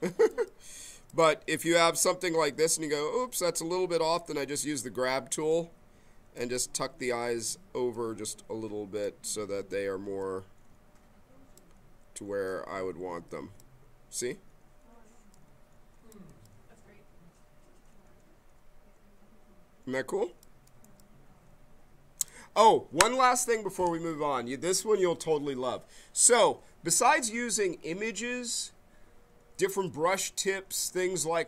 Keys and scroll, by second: 5.3 b.